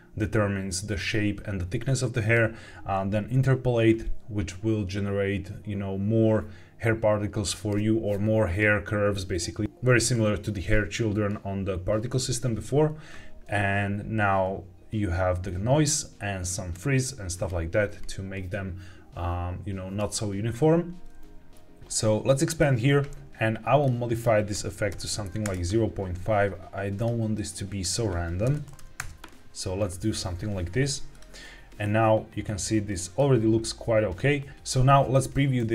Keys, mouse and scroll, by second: 22.4 click, 23.7 click, 24.0-25.4 drag, 26.9 click, 27.7-29.0 drag, 31.0 click, 31.7-33.1 middle drag.